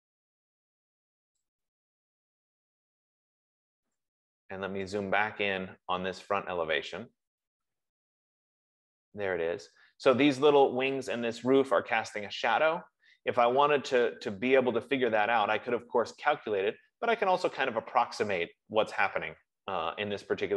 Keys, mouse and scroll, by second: 0.5-2.5 drag, 2.0 F15, 5.7-6.5 scroll, 6.8-8.2 scroll, 8.2 scroll, 9.5-13.2 middle drag, 14.3-19.3 middle drag.